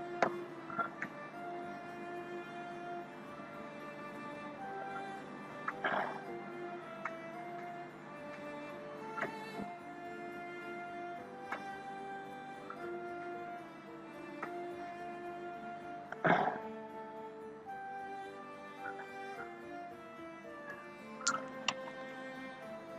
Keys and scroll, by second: 3.9 ctrl+=.